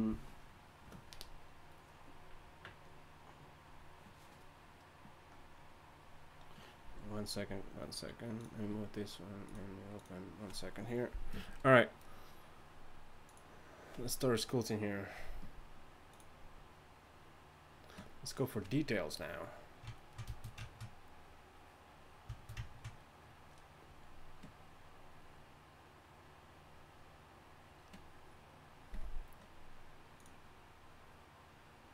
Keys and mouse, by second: 20.0 click, 22.4-31.9 middle drag.